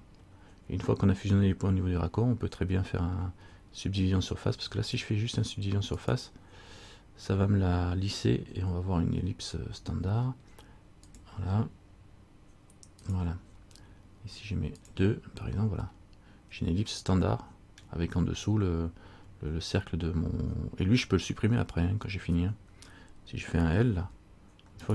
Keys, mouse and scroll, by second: 5.0 click, 6.1 click, 13.2 click, 14.9 click, 16.1 middle click, 24.2 l.